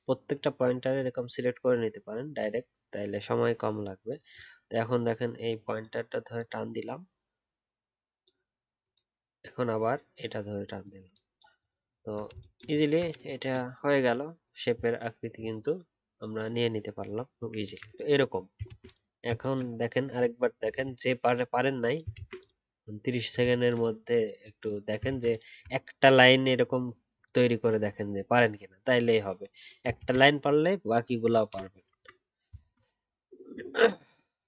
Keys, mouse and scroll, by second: 1.9 alt+scroll up 1, 11.9 alt+scroll down 1, 12.8-13.3 alt+scroll down 1, 18.6 ctrl+z, 22.1 ctrl+z, 25.0 ctrl+z, 29.9 ctrl+z, 32.6-34.2 alt+scroll down 1.